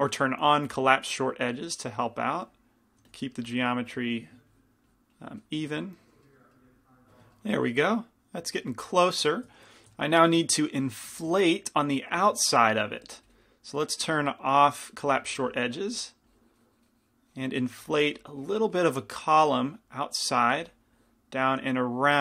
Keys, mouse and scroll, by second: 1.3 f, 3.2 f, 6.0-7.3 middle drag, 10.1 f, 11.3 f, 11.3 i, 11.7-22.2 drag, 12.5 shift+f, 15.6 f, 20.8 f.